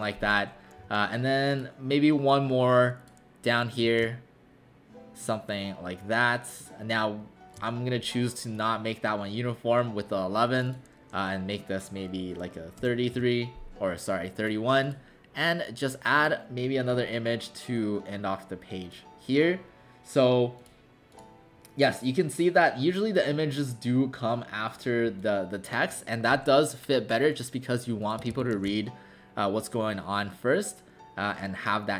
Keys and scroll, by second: 0.8 w, 12.8-13.1 typing, 14.5-15.2 typing, 28.5 ctrl+alt+shift+c.